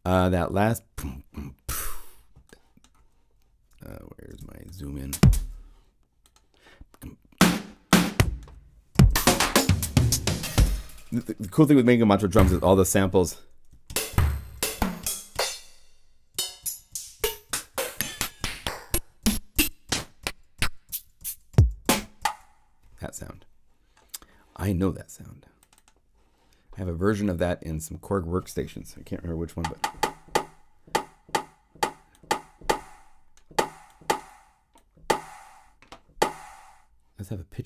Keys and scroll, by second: 8.9 alt+Up, 12.3 alt+Up, 13.8 alt+Up, 14.1 alt+Down, 14.5 alt+Up.